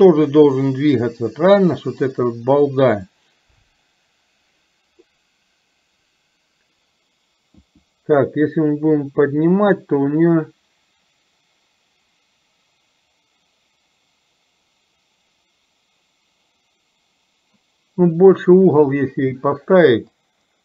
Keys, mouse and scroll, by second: 1.9-20.6 scroll down 1.